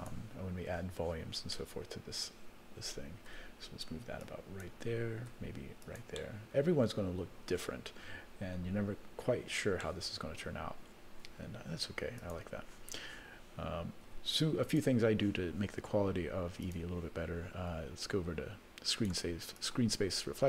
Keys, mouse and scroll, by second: 0.0 click, 1.5 middle click, 3.3 r, 5.3 r, 6.1-7.6 middle drag, 7.8 scroll up 2, 9.0 scroll down 1, 9.8-10.9 middle drag, 12.2 click, 14.0 r, 16.6 click, 18.9 click, 19.6 click.